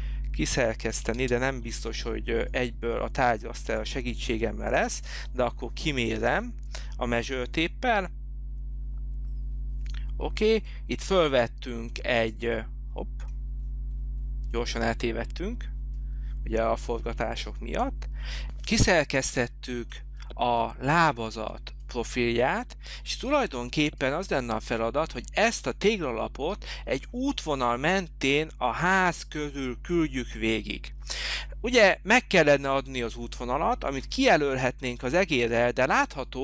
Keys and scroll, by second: 1.1 space, 17.0 h.